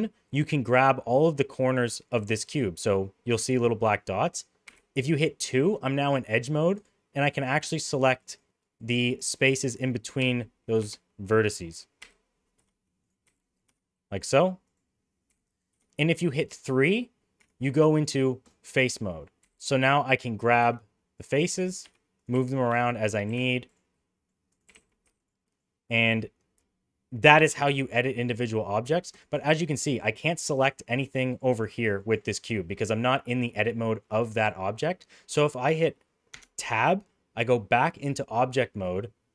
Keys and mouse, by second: 1.6 middle click, 4.6 2, 7.3 click, 8.2 click, 8.7 click, 10.2 g, 12.0 g, 13.2 g, 15.2 g, 17.3 3, 18.4 click, 19.4 g, 21.4 g, 22.3 g, 23.2 g, 23.9 middle click, 24.4 click, 24.6 g, 25.4 middle click, 25.9 middle click, 27.2 middle click, 29.3 click, 29.8 click, 30.1 click, 30.4 click, 30.8 click, 31.3 click, 31.4 click, 31.7 click, 31.9 click, 36.3 Tab.